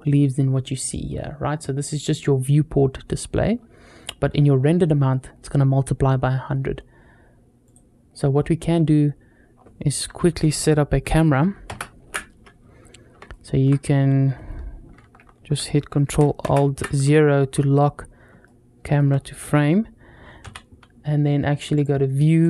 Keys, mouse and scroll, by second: 7.6 click, 8.2-8.9 scroll down 2, 9.6-10.8 scroll up 1, 11.5 ctrl+alt+KP_0, 13.1-13.5 shift+middle drag, 16.3 ctrl+alt+KP_0, 17.7-18.1 scroll up 2, 18.3-18.8 shift+middle drag, 20.2 n, 21.6 click, 22.3 click.